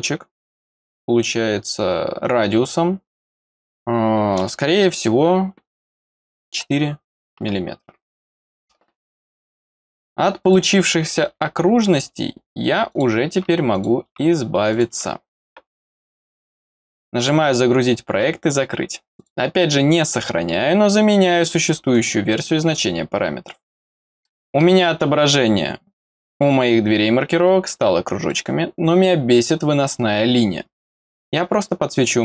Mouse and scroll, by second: 12.9 click, 13.7 click, 14.7 click, 17.1 click, 19.1 click, 21.9 click, 23.7-24.1 scroll up 1, 24.2 middle click, 28.2 click.